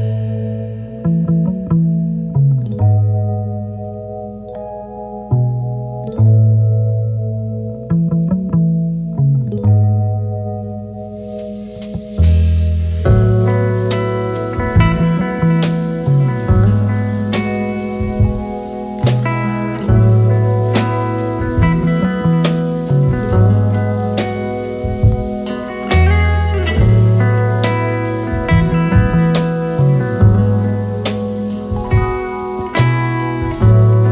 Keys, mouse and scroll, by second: 1.7 click, 3.3 shift+click, 3.5 click, 4.6 click, 5.3 click, 6.3 click, 6.9 alt+Tab, 10.6 click, 13.2-15.4 drag, 17.4-18.2 typing, 24.8 typing, 26.6 click, 29.1 click, 33.4-34.1 drag.